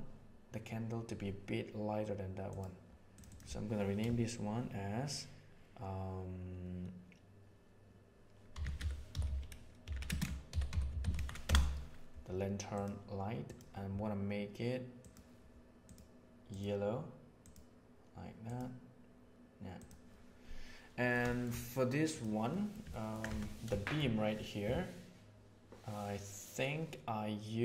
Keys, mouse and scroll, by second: 3.1-12.5 drag, 12.6 click, 20.9 middle click, 21.2 shift+middle drag, 22.0 click, 22.4 middle click, 22.8 ctrl+middle click, 23.7 shift+middle click.